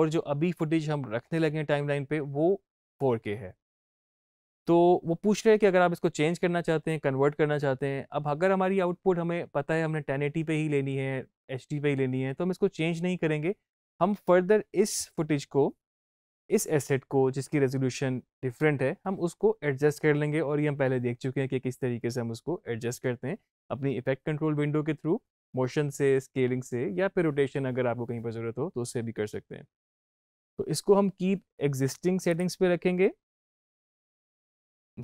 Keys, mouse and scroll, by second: 32.2-35.0 drag.